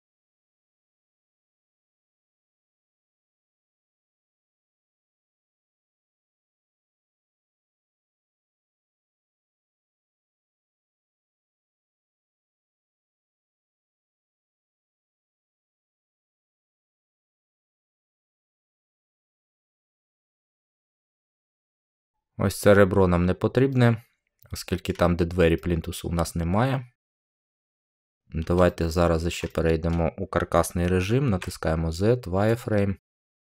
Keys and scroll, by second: 31.2 z.